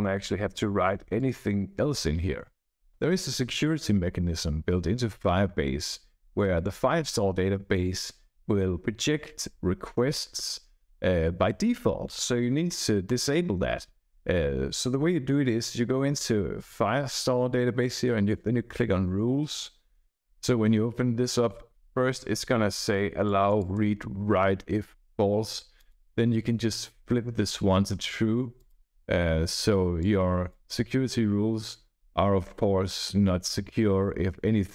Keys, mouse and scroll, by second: 1.1 click, 13.0 click, 23.2 click, 24.3-25.5 typing, 25.7 click, 26.6-27.6 typing, 28.5 click, 29.9 click.